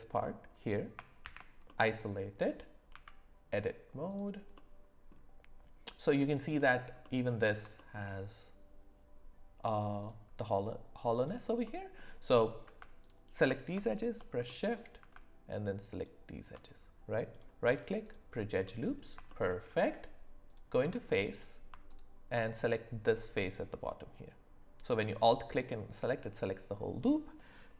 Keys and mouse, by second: 1.2 shift+h, 1.7-2.4 middle drag, 2.9 Tab, 4.1 click, 4.5 middle click, 7.0 middle click, 7.8 shift+middle click, 10.0 click, 11.2 click, 11.6 middle click, 13.0 ctrl+shift+click, 13.9 shift+click, 14.5 middle click, 15.9 ctrl+shift+click, 17.3 right click, 18.6 middle click, 19.3 shift+middle click, 20.5 click, 20.9 middle click, 23.3-25.1 middle drag.